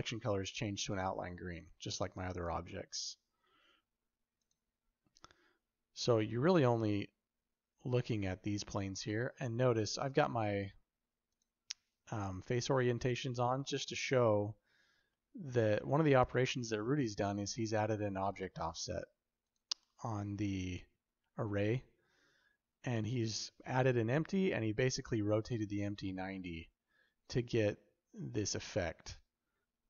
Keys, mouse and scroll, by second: 1.4 click, 2.2 click, 2.8 click, 11.3-14.1 drag, 15.1-16.9 shift+middle drag, 18.0 click, 19.3 click.